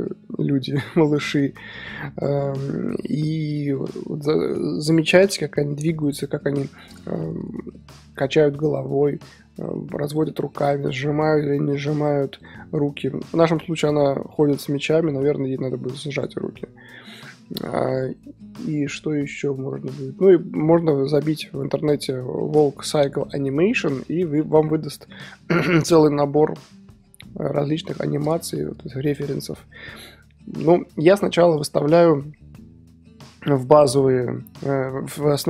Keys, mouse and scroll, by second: 9.0-10.8 middle drag, 10.5 click, 10.8-11.2 scroll up 2, 11.5-12.0 scroll down 3, 13.3-13.9 middle drag, 13.9-14.4 scroll up 3, 14.4-15.4 middle drag, 15.4-16.2 scroll down 2, 16.2-16.9 scroll down 1, 16.9-17.5 scroll down 1, 17.5-35.4 middle drag.